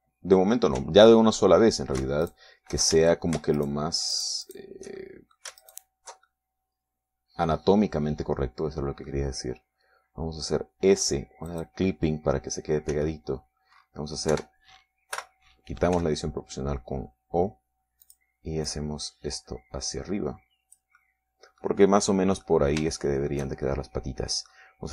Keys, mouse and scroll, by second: 0.3 a, 0.9 ctrl+Tab, 3.8 alt+shift+right click, 4.5 alt+shift+a, 5.1 alt+shift+middle click, 5.7 alt+shift+right click, 6.2 alt+shift+right click, 6.7 alt+shift+middle click, 7.1 alt+shift+right click, 7.8-10.8 alt+shift+middle drag, 13.0 click, 14.5 s, 15.3 scroll up 1, 15.9 Escape, 16.7 o, 17.5 s, 19.6 click, 20.2-22.5 drag, 22.5-24.9 middle drag.